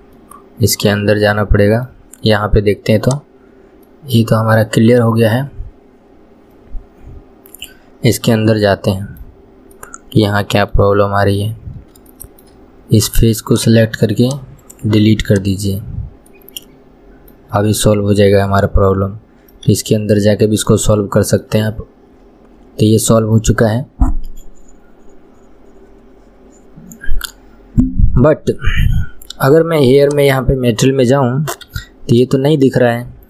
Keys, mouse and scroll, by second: 0.3-3.2 middle drag, 3.2 click, 4.0-5.3 middle drag, 5.3 scroll down 2, 7.8-9.6 middle drag, 9.6 scroll up 1, 9.9-11.2 middle drag, 11.2 scroll up 2, 12.3-13.6 shift+middle drag, 13.6 click, 14.8-16.5 right drag, 16.5-18.1 middle drag, 18.1-18.6 scroll down 2, 18.6-19.9 middle drag, 19.9 KP_1, 20.4 scroll down 1, 20.9-22.6 middle drag, 22.6-23.0 scroll down 1, 23.0-26.0 middle drag, 30.2-31.9 drag, 31.9 KP_3, 32.3 scroll down 1, 32.5 shift+middle click.